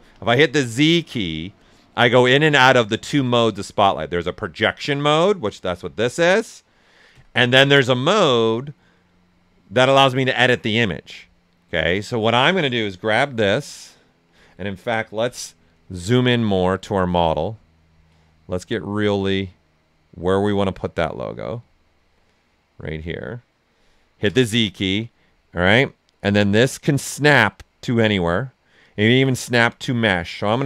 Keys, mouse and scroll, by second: 0.0 z, 1.8-3.2 typing, 4.6 z, 7.0 z, 12.6-15.2 drag, 15.2 z, 15.7 ctrl+right click, 16.6-18.5 ctrl+right drag, 18.5-22.0 alt+right drag, 22.0-24.2 alt+right drag, 24.2 z, 25.5-26.9 drag, 26.9-30.6 drag.